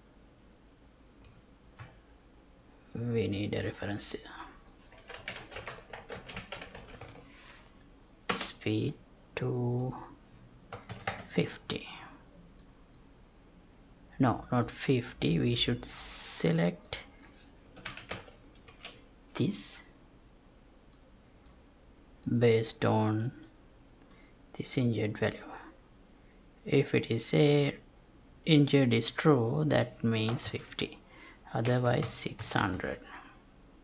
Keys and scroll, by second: 5.3 space, 6.1 space, 30.7 Tab.